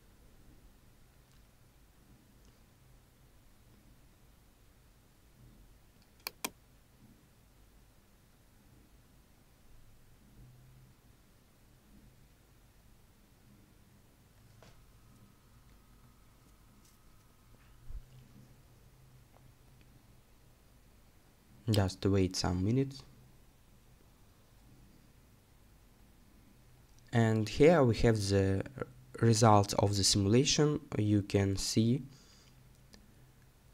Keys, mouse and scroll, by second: 27.9-31.4 scroll down 1.